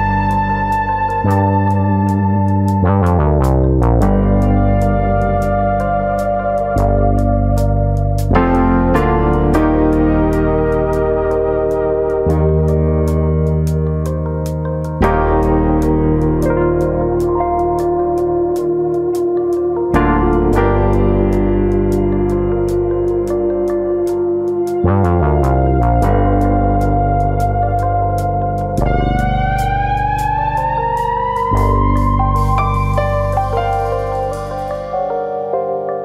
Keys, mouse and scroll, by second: 0.2 shift+middle click, 0.4 shift+middle click, 1.2 click, 1.5 Tab, 2.0 middle click, 2.6 alt+click, 3.2 alt+shift+click, 3.6 middle click, 4.6 alt+shift+click, 4.9 middle click, 5.5 g, 7.4 click, 7.4 middle click, 9.1 alt+click, 9.4 middle click, 10.6 alt+shift+click, 11.1 middle click, 11.9 alt+shift+click, 12.8 g, 17.4 click, 17.5 middle click, 18.3 scroll up 2, 18.5 middle click, 20.2 click, 20.6 shift+click, 20.9 middle click, 21.3 g, 22.9 click, 23.8 middle click, 24.4 shift+click, 24.6 shift+click, 24.6 middle click, 25.5 g, 27.8 click, 28.0 middle click, 28.5 middle click, 29.0 click, 29.2 middle click, 30.0 click, 30.8 middle click, 31.4 click, 31.8 click, 32.6 click, 32.9 middle click, 33.3 click, 34.9 middle click, 35.3 middle click.